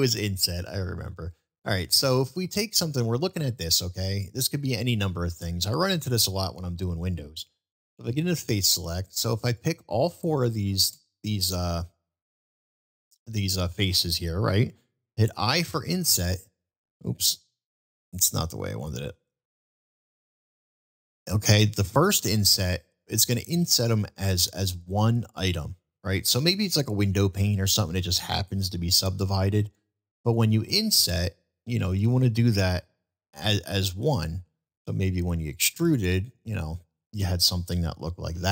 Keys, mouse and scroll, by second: 0.8 middle click, 2.6-3.4 middle drag, 5.8 middle click, 8.7 click, 9.5 shift+click, 33.6-34.6 middle drag, 35.4 click, 35.8-37.1 middle drag, 38.0 ctrl+z.